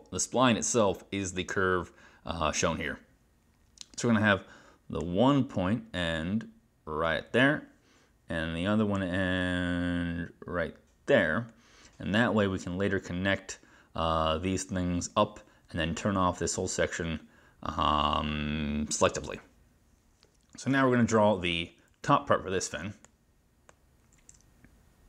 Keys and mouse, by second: 9.1 click, 24.4 click.